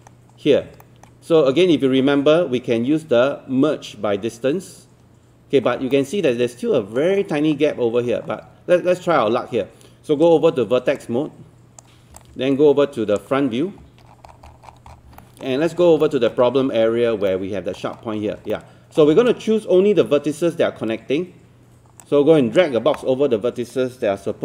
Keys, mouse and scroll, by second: 0.0-0.4 scroll up 1, 0.8 alt+middle click, 1.0-1.4 scroll up 1, 5.9 alt+middle click, 8.1-8.5 scroll down 1, 8.5-10.2 scroll up 1, 10.2-11.9 right drag, 12.2 click, 13.8 alt+scroll up 1, 14.1 scroll down 1, 15.2 alt+middle click, 16.0 alt+middle click, 16.0-16.6 alt+scroll up 2, 17.3 alt+middle click, 18.0-18.4 scroll up 1, 18.5 alt+middle click, 22.0 click.